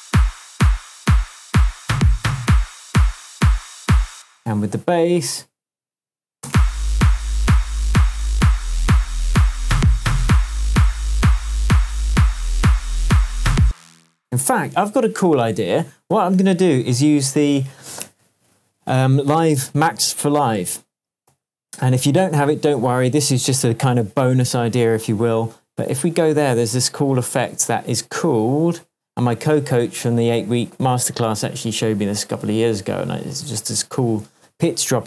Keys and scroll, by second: 4.1 space, 4.8 super+space, 6.4 super+space, 7.2 space, 13.6 space, 21.3 super+d, 33.7 Down.